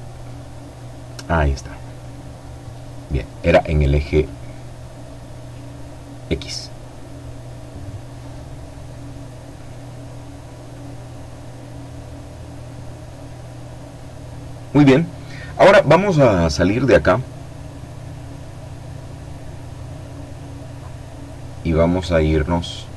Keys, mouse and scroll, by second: 10.9-11.5 scroll down 2, 11.5 scroll down 1, 12.9-13.3 scroll down 2, 13.5-13.9 scroll down 2, 17.7-18.9 scroll down 2, 18.9-19.3 scroll up 1, 19.3 scroll down 1, 19.6-20.1 scroll up 1.